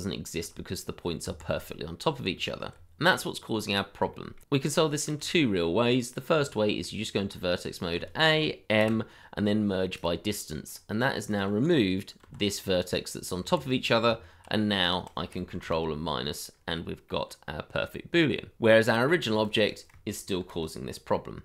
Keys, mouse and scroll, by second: 0.3 g, 1.2 Escape, 1.5-1.9 scroll down 1, 2.2-2.7 scroll, 2.7 Tab, 3.3-4.0 scroll down 1, 4.1 shift+middle click, 5.0-6.1 scroll up 1, 6.5 shift+middle click, 6.9 middle click, 7.1 shift+middle click, 7.4 Tab, 8.0 a, 8.8 m, 10.7-11.3 scroll up 1, 12.2 g, 13.4 Escape, 13.7-14.0 scroll down 1, 14.0 Tab, 14.9 shift+click, 15.9 ctrl+KP_Subtract, 16.5 scroll up 1, 16.8 middle click, 18.3 scroll down 1, 18.5 shift+middle click, 18.9-19.5 scroll up 1, 20.4 ctrl+-, 21.2 middle click.